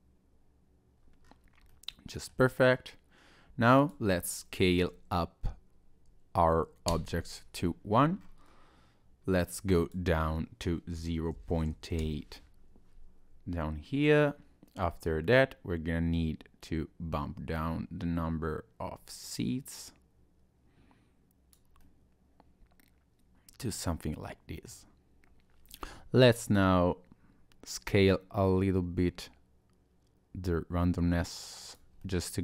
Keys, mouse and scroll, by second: 1.2-1.7 scroll down 2, 1.7 middle click, 1.7 scroll up 1, 2.7-3.3 scroll down 4, 3.8 click, 7.9-9.2 scroll up 4, 9.2 scroll up 1, 9.7 click, 13.9 scroll up 1, 14.0-14.5 scroll down 1, 15.0 click, 21.8 middle click, 27.9 click, 32.0 middle click.